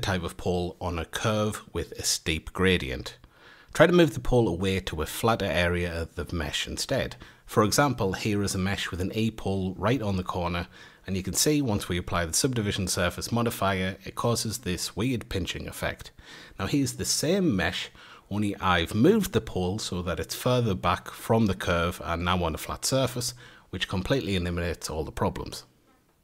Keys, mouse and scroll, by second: 1.3 ctrl+1, 2.4 ctrl+2, 4.5-4.9 scroll up 4, 4.9-8.0 middle drag, 8.0 scroll down 1, 8.8-9.6 shift+middle drag, 9.6 click, 10.0-10.7 shift+middle drag, 10.7-11.2 scroll up 1, 11.2 Tab, 11.8-16.0 middle drag, 17.2 Tab, 18.4 ctrl+2, 19.9-22.8 middle drag, 22.8 shift+click, 23.2 Tab, 24.0-26.1 middle drag, 26.1 scroll up 1.